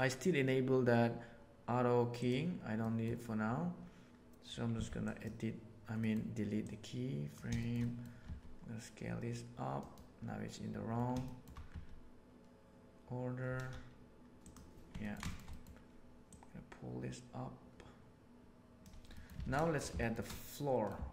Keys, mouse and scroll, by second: 2.7 middle click, 4.6 x, 5.9 middle click, 6.6 right click, 7.5 shift+middle click, 7.7 middle drag, 8.2 s, 11.2 shift+middle click, 11.6 s, 14.9 ctrl+middle click, 15.2 shift+middle drag, 15.4 middle click, 16.2-18.8 drag, 19.1 middle click, 19.4 alt+a, 19.9 shift+middle click, 20.2-20.9 middle drag, 21.0 alt+a.